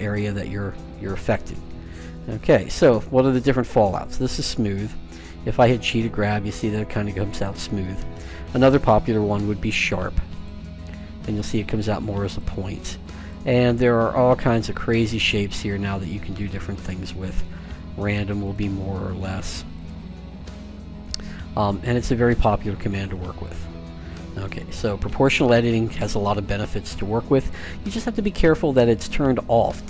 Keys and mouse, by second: 4.4-6.2 middle drag, 5.3 g, 8.4-10.2 drag, 10.7 g, 13.0-14.8 drag, 15.5 g, 19.6-21.4 drag, 21.5-23.3 drag, 23.1 g, 28.4-29.8 drag.